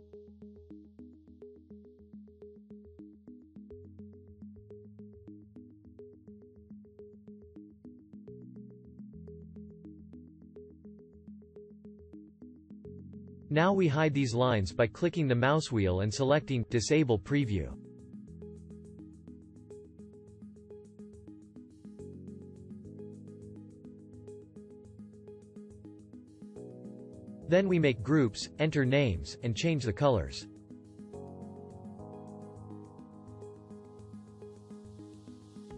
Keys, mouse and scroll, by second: 15.6-18.2 middle drag, 32.5 ctrl+g.